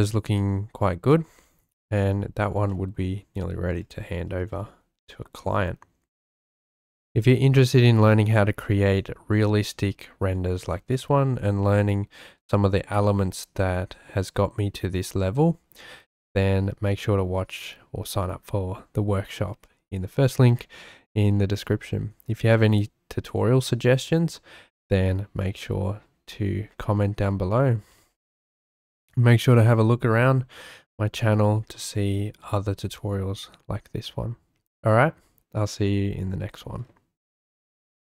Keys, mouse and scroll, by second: 0.0-1.4 shift+drag, 2.7 shift+click, 5.1-6.2 shift+middle drag, 10.9-12.2 shift+middle drag.